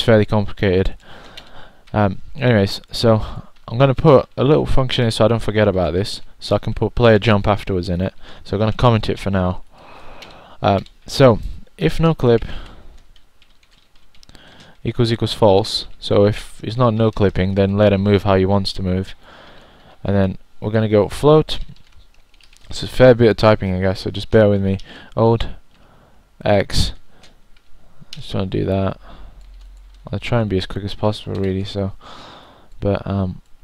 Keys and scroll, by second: 0.8-2.0 typing, 9.6-10.5 typing, 13.2 1, 14.8-17.3 typing, 19.4-20.3 typing, 31.1-33.6 typing.